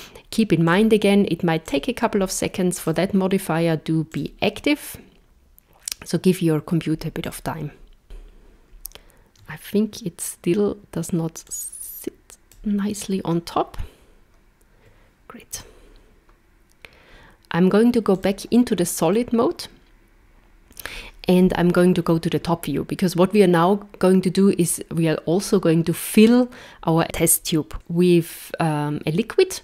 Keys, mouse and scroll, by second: 0.7 click, 1.6 click, 2.8 click, 4.1 click, 8.0 scroll up 3, 11.5 click, 15.5 z, 19.1 middle click, 21.5 KP_7.